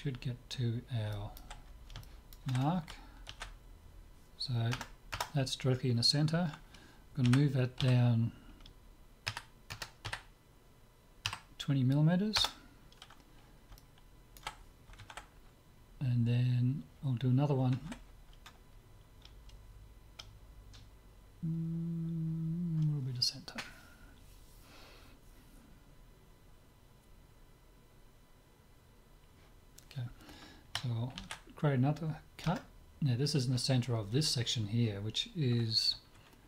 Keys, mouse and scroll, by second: 1.2-4.0 middle drag, 3.3 ctrl+r, 7.2 g, 13.8-15.2 middle drag, 31.2 ctrl+r.